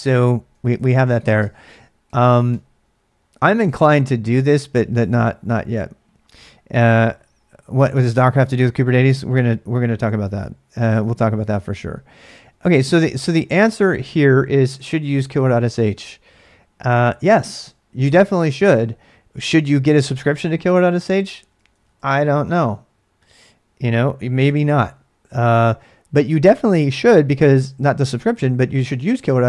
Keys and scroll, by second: 0.2 ctrl+[, 0.8 ctrl+[, 0.9-3.0 typing, 10.3 ctrl+a, 10.4 ctrl+a, 21.3-23.3 typing, 24.4 alt+Tab.